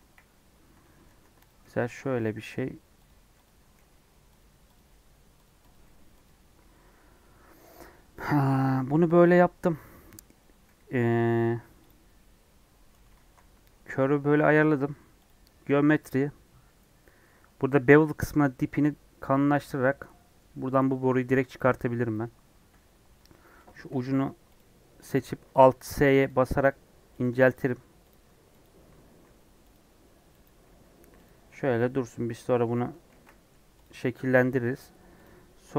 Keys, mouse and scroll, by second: 1.0 Tab, 1.4 click, 1.5 g, 3.4 click, 3.7 g, 4.7 click, 4.8 g, 5.6 click, 5.7 g, 6.5 Tab, 11.8 click, 12.0 Tab, 12.5 Tab, 18.4-21.3 drag, 23.1 Tab, 23.6 click, 23.8 alt+s, 25.0 click, 25.2 alt+s, 26.2 click, 26.5 alt+s, 27.4 click, 28.0 click, 28.5 click, 29.0 alt+s, 30.4 click, 30.6 alt+s, 31.4 Tab, 32.3 alt+s, 33.0 ctrl+z, 33.7 click, 34.0 scroll down 3, 34.3 middle click, 34.7 scroll up 4, 35.1 click.